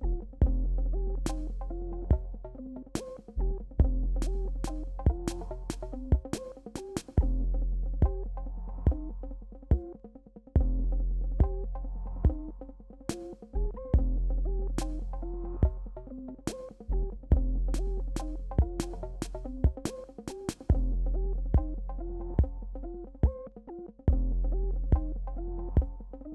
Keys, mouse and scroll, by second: 1.3 right click, 1.7 click, 1.9 Return, 2.7 click, 3.3 alt+scroll up 1, 3.6 click, 5.1 alt+click, 5.3 right click, 5.8 click, 6.1 Return, 6.8 BackSpace, 7.4 alt+scroll down 1, 8.1 click, 8.4 ctrl+z, 8.6 click, 9.8 alt+click, 9.9 right click, 10.6 click, 11.0 Return, 11.6 alt+scroll down 1, 12.1 click, 12.3 alt+scroll up 1, 12.6 click, 13.7 right click, 14.2 click, 14.3 Return, 14.6 BackSpace, 15.8 alt+scroll down 2, 16.5 scroll down 1, 17.8 click, 20.1 click, 20.5 click, 20.8 click, 21.2-22.9 drag, 23.1-23.7 scroll down 1, 23.7 click.